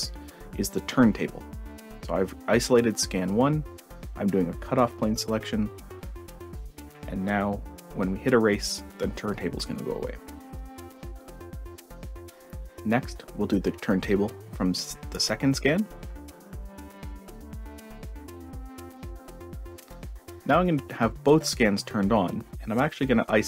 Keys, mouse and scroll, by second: 0.6-2.2 ctrl+drag, 3.7 ctrl+shift+scroll up 1, 10.6 click, 12.1 click, 12.4 click, 13.1-14.4 ctrl+drag, 16.0 ctrl+shift+scroll up 1, 18.1 click, 20.1 click, 20.7-22.1 drag.